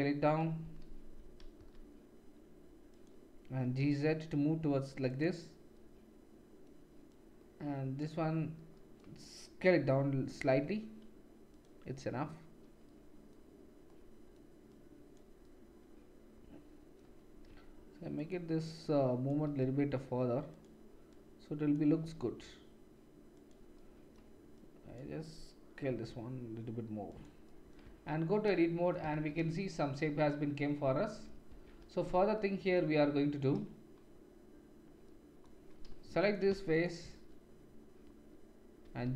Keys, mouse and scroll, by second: 1.5 s, 3.0-7.2 middle drag, 3.6 g, 7.2-11.6 drag, 10.3 s, 11.6-14.7 middle drag, 14.7-18.3 drag, 17.4 g, 18.3 middle click, 18.8-20.7 drag, 19.4 g, 20.7 middle click, 21.1-23.5 drag, 22.0 g, 23.5 middle click, 24.6-27.2 drag, 25.8 s, 27.8 Tab, 29.1 shift+z, 31.5 Tab, 35.9 3, 36.7 shift+click, 38.8 g.